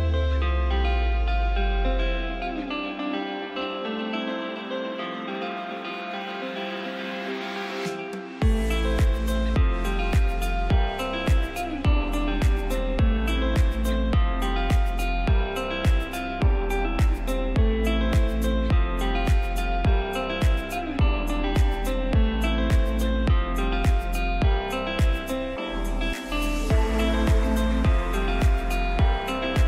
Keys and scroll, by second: 0.2 shift+F2, 0.8 Escape, 7.7 F3, 8.0 Escape, 10.4 c, 12.4 shift+F2, 12.8 shift+Page_Up, 13.3 F3, 13.6 Escape, 24.0 ctrl+z, 29.0 ctrl+z.